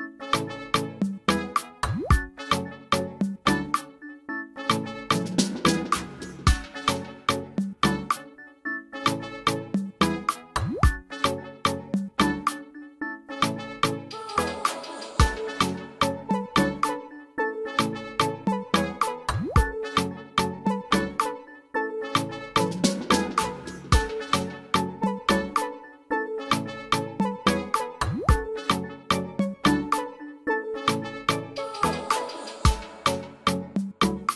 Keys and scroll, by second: 3.7 ctrl+alt+space, 19.6 ctrl+alt+space.